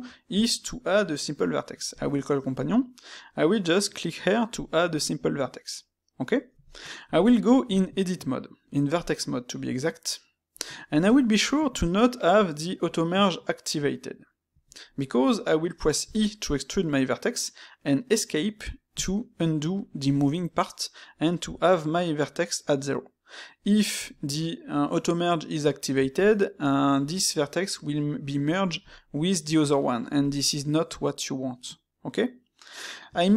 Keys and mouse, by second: 1.8 shift+q, 6.7 shift+middle click, 7.6 Tab.